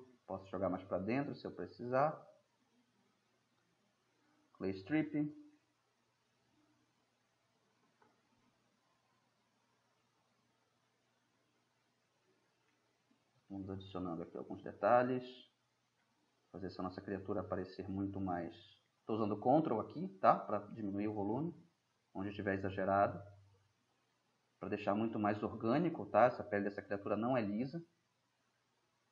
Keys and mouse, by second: 1.1-2.7 drag, 2.3-3.3 middle drag, 4.4 click, 4.8-5.7 middle drag, 7.1 [, 7.2 [, 8.5-11.1 drag, 11.7-12.8 drag, 16.1 drag, 16.3 drag, 16.6-18.0 middle drag, 19.0-20.7 middle drag, 23.3-23.7 middle drag, 23.7 drag, 24.0 middle click, 24.2 click, 24.3-24.7 middle drag, 26.4-27.5 drag, 28.7-29.1 drag.